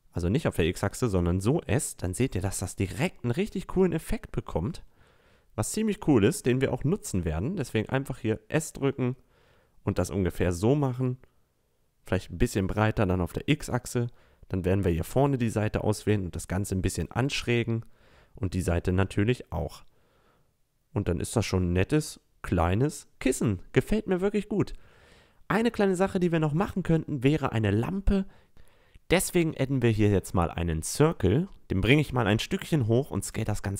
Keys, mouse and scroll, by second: 6.2 s, 10.8 s, 13.1 a, 14.2 click, 16.9 click, 19.4 a, 19.5 Tab, 21.3-22.2 drag, 22.2 a, 30.6 click, 32.8 s.